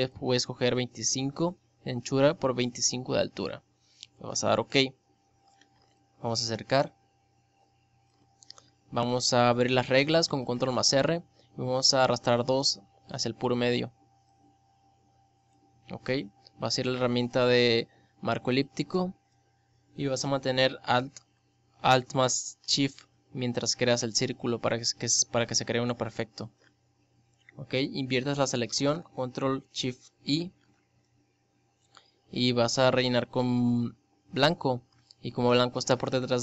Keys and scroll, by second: 9.1 ctrl+r.